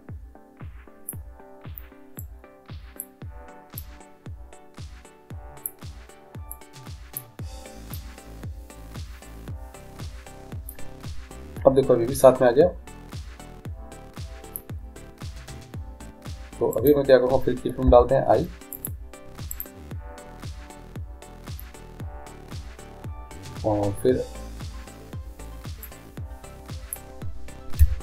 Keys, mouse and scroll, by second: 2.2-5.7 drag, 6.6-10.0 drag, 16.8-18.6 right drag, 17.9 i, 19.6-21.5 right drag, 25.9-27.8 drag, 27.8 i.